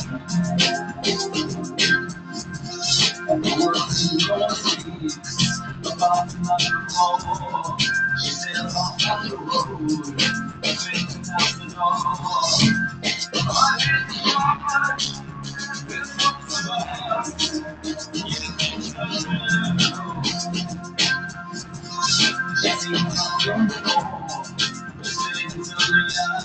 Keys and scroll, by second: 5.4 super+d, 6.6 Right.